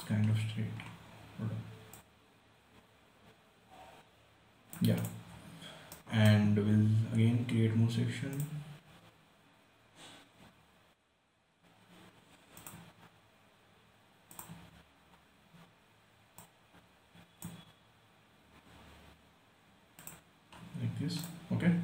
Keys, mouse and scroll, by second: 0.7 scroll down 1, 1.1 scroll up 1, 2.3-5.3 drag, 5.7-6.3 scroll down 1, 6.3-8.7 right drag, 8.7 click, 12.9-20.2 drag, 20.3 click, 20.8 scroll down 1, 21.5 click.